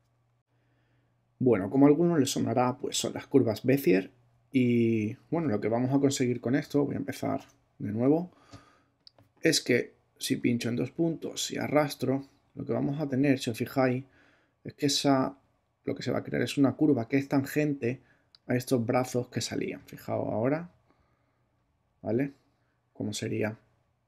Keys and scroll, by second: 7.3 BackSpace.